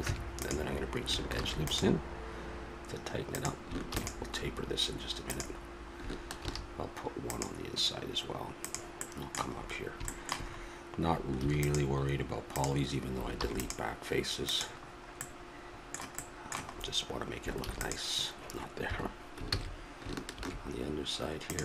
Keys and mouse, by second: 0.0 Tab, 1.3 ctrl+r, 3.9 ctrl+r, 10.1-11.4 middle drag, 11.4 ctrl+r, 14.9-17.6 middle drag, 17.6 ctrl+r, 19.4 ctrl+z.